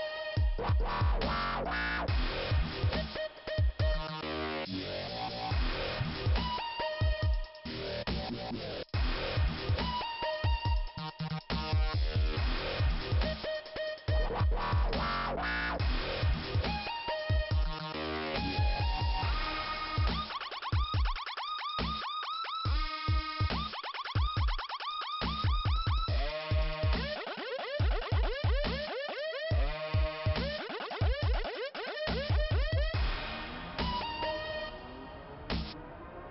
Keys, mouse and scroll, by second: 0.0 click, 1.6 m, 2.8 click, 3.5 m, 4.1-4.7 scroll down 2, 5.9 click, 7.2 scroll up 2, 9.5 click, 10.7 click, 12.1 click, 13.4 Delete, 15.0 click, 18.1 click, 18.8 click, 20.6 click, 22.9 click, 24.2 click, 25.6 click, 26.8 click, 29.1 click, 32.2 click, 34.0 click, 34.7 click, 35.1 click, 35.2 double click, 35.5 double click.